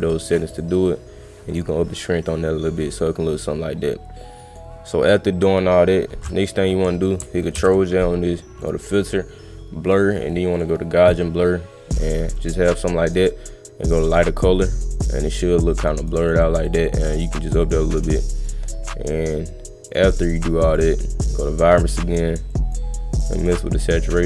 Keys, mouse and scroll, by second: 0.0 click, 0.2 click, 0.5 click, 1.5 click, 2.3-4.6 drag, 8.6 click, 10.6 click, 12.3 click, 13.1 click, 14.1 click, 14.9 click, 15.8 click, 16.0 click, 16.2 click, 16.4 click, 16.7 click, 16.8 click, 17.0 click, 17.2 click, 17.4 click, 17.6 click, 18.4 click, 19.9 click, 20.7 click, 21.5 click, 22.5 click, 23.2 click.